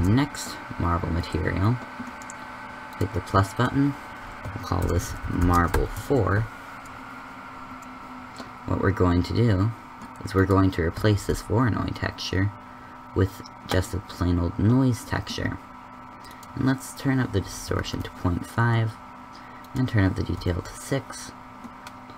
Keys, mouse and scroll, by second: 11.3 shift+s.